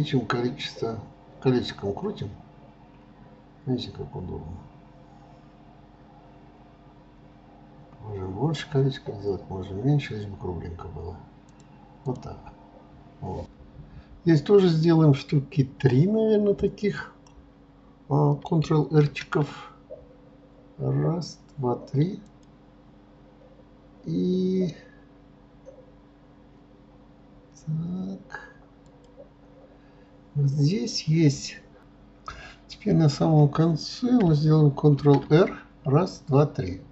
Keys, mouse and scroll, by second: 11.7 click.